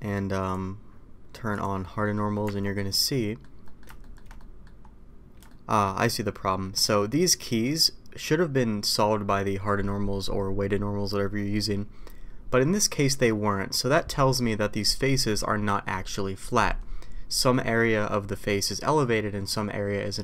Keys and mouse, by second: 2.0 middle click, 2.4 Tab, 2.8-3.4 middle drag, 3.6 middle click, 4.0 shift+middle drag, 4.3 middle drag, 5.5 shift+middle drag, 6.6 middle click, 7.6 middle click.